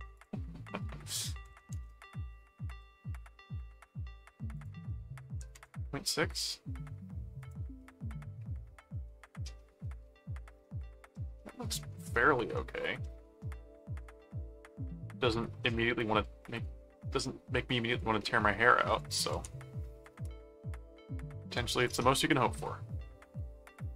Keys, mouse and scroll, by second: 0.1 click, 4.5 click, 7.4 click, 7.8 middle click, 8.9-10.2 middle drag, 10.6 middle click, 11.4 middle click, 12.1 middle click, 12.9 click, 12.9 middle click, 14.0 middle click, 15.6-16.6 middle drag, 18.2 middle click, 19.1 ctrl+click, 19.3 ctrl+s, 21.8 ctrl+click, 22.1 ctrl+Tab.